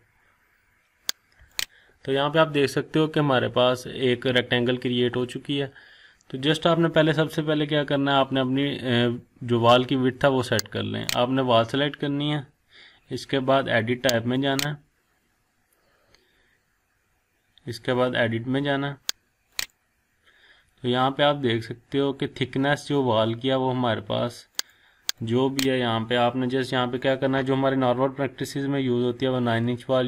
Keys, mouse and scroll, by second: 0.2 scroll down 1, 0.8-1.5 scroll up 1, 1.5 click, 11.0 click.